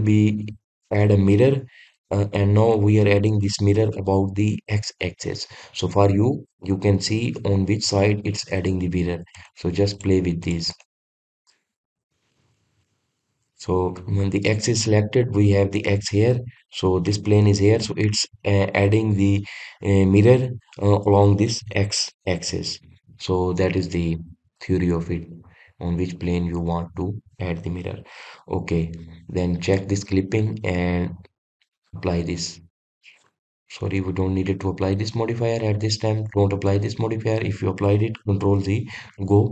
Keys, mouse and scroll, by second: 10.1 click, 10.7 click, 11.2 drag, 11.5 click, 12.2-13.1 middle drag, 13.1-13.6 scroll down 1, 13.6-16.6 middle drag, 24.8-25.3 scroll down 2, 25.3-26.7 middle drag, 26.7-27.0 scroll up 1, 27.3-27.8 scroll down 1, 27.8-30.5 scroll up 2, 30.5 click, 31.9-34.6 drag, 34.6 ctrl+z, 35.6 click.